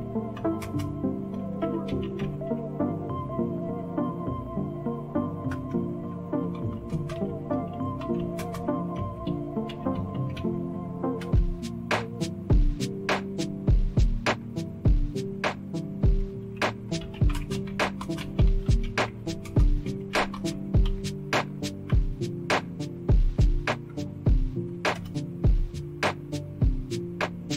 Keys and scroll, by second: 0.0-2.7 typing, 5.5 Return, 6.2-10.8 typing, 11.2 Return, 16.6-22.4 typing, 24.9 Return.